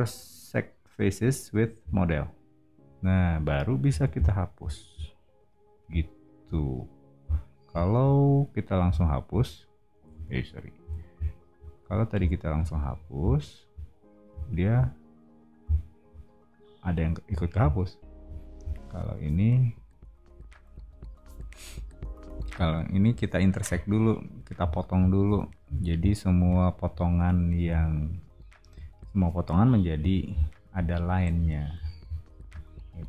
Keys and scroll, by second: 3.8 e, 10.1 super+z, 10.8 o, 12.8 e, 17.7 o, 22.0-23.0 typing, 25.6 o, 27.6 e, 29.9 o, 31.7 e.